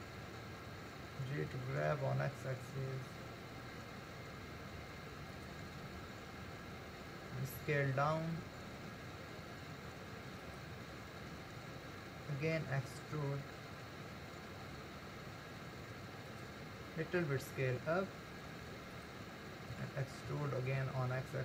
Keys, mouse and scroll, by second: 1.2 g, 7.6 s, 12.9 e, 17.4 s.